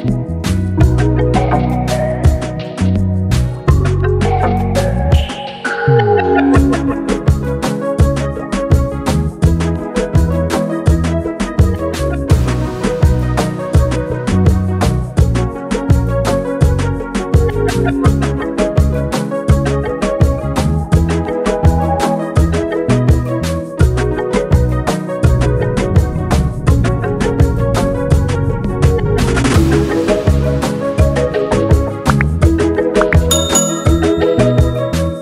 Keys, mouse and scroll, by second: 2.7 ctrl+d, 4.3 click, 4.9 ctrl+space, 5.0 ctrl+click, 5.3 ctrl+space, 6.2 ctrl+click, 6.3 ctrl+space, 7.2 click, 9.9 ctrl+j, 12.3-20.8 drag, 19.3 click, 24.7 ctrl+t, 25.6 right click, 26.7 click, 28.8 ctrl+space, 28.9 ctrl+click, 29.1 ctrl+space, 29.8 ctrl+space, 31.2 shift+click, 32.5-35.2 drag.